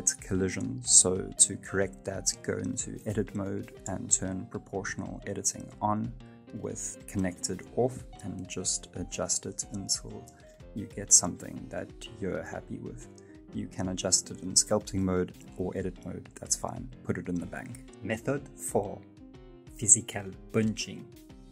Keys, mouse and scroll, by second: 0.7 shift+middle click, 1.0 scroll up 3, 1.4 middle click, 2.5 click, 3.8 right click, 3.9 middle click, 4.5 g, 5.3 click, 5.5 g, 6.7 alt+o, 7.0 g, 8.3-9.0 scroll down 2, 8.5 middle click, 9.0 right click, 9.1 middle click, 9.4 g, 10.0 middle click, 11.5 middle click, 11.9 middle click, 12.4 right click, 12.7 g, 13.4 middle click, 14.0 Tab, 14.1-14.5 scroll down 4, 14.2 middle click, 15.2-15.7 scroll up 4, 15.7 shift+middle click, 16.0-16.7 scroll down 2, 16.4 g, 17.4 shift+middle click, 17.8-21.5 scroll down 1.